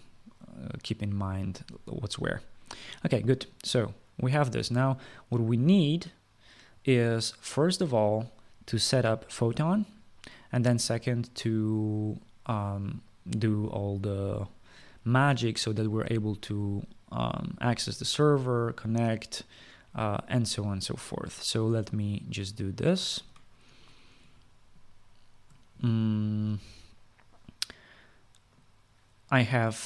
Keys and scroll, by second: 23.8 ctrl+s.